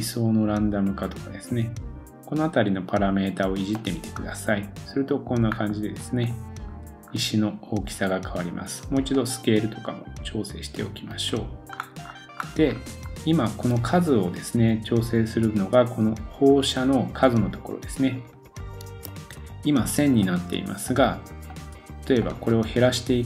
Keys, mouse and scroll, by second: 3.4 scroll down 2, 3.8 middle click, 6.6 scroll down 2, 9.1 scroll down 3, 11.7-12.1 scroll up 4, 12.6-13.1 scroll up 6, 19.1 super+s, 21.6-22.2 middle drag, 22.2-23.2 drag.